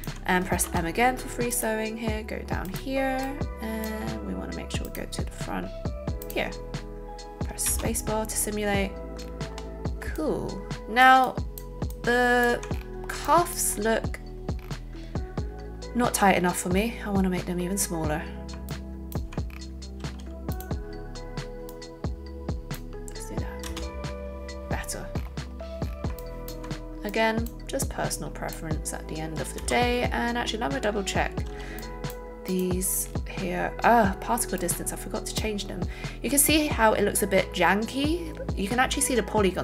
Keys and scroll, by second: 0.6 alt+m, 7.7 space, 19.9 a, 23.7 space, 29.6 space.